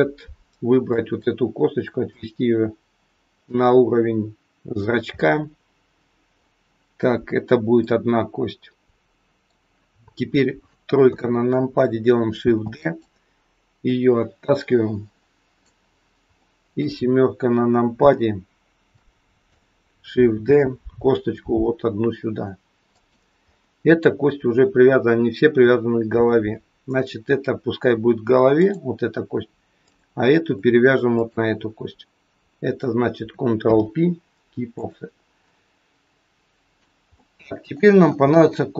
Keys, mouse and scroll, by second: 0.8 click, 2.1 click, 5.1 middle click, 7.8 middle click, 11.0 KP_3, 12.3 shift+d, 13.8 click, 16.3 middle click, 18.0 KP_7, 19.0 shift+middle click, 20.4 shift+d, 23.4-24.8 scroll up 3, 28.6 click, 29.8 click, 31.1 shift+click, 33.7 ctrl+p, 35.4 middle click, 37.1 middle click, 37.1-37.8 scroll up 1, 37.8 scroll down 2, 38.3 shift+middle click.